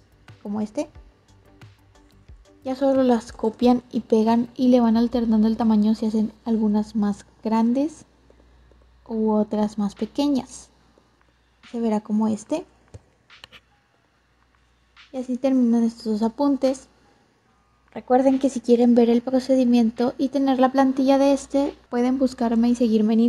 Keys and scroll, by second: 3.0 ctrl+c, 3.2 ctrl+v.